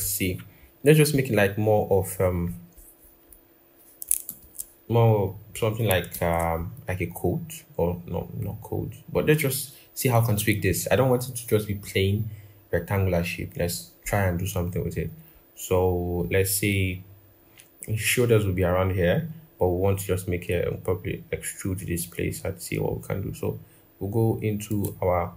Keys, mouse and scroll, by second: 0.2-1.0 scroll, 1.9 scroll, 4.0 ctrl+=, 4.2 ctrl+=, 5.5 scroll down 1, 5.9 ctrl+-.